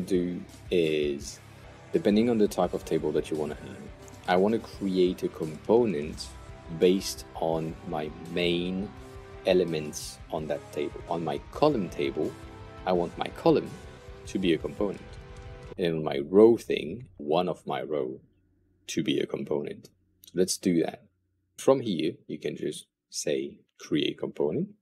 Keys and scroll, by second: 13.9 super+\.